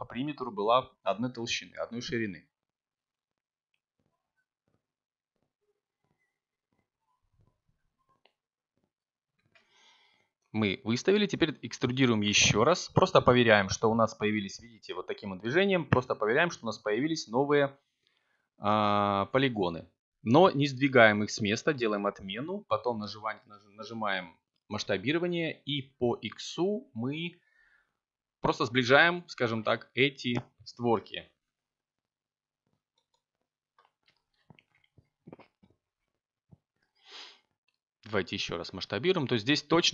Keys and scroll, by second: 5.0 7, 8.3 e, 11.3 g, 13.8 s, 14.2 x, 30.3 s, 34.1 x, 38.8 3.